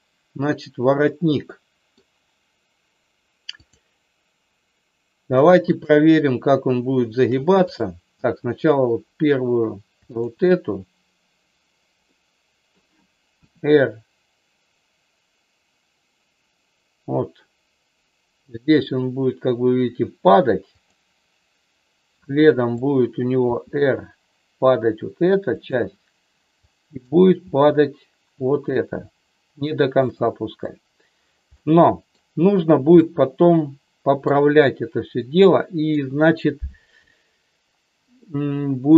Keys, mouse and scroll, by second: 1.1 middle click, 3.5-4.9 drag, 5.7-7.1 shift+drag, 7.7-9.0 drag, 10.1-11.4 shift+drag, 12.1 middle click, 13.3 r, 20.8 click, 22.2 click, 23.4 r, 26.6 click, 27.3 r, 29.9 click, 31.6 middle click, 32.9-34.3 middle drag, 35.2 middle click.